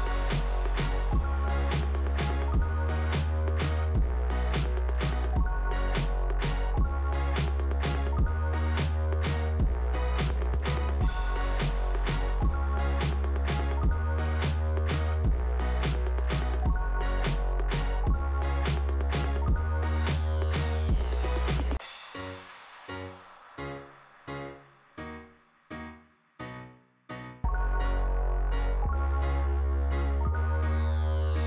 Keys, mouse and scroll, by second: 6.6-7.7 scroll down 2, 13.6 scroll up 2, 21.9 scroll down 2, 22.7 middle click, 28.2 middle click, 29.3 scroll up 1.